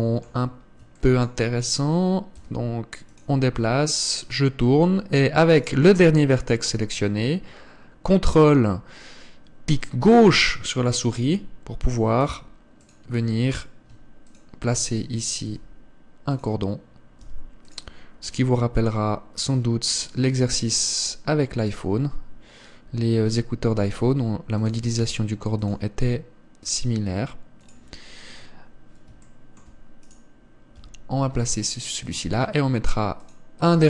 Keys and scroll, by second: 24.5 g, 25.7 r.